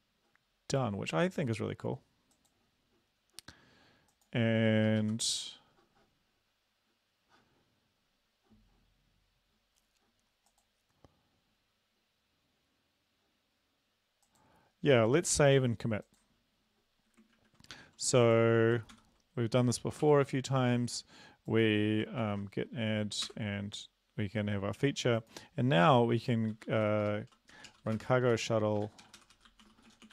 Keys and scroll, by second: 5.3 super+Left, 17.3 ctrl+`, 18.9 ctrl+c, 20.1 ctrl+l, 22.2 ctrl+v, 23.3 Return, 26.5-30.1 typing.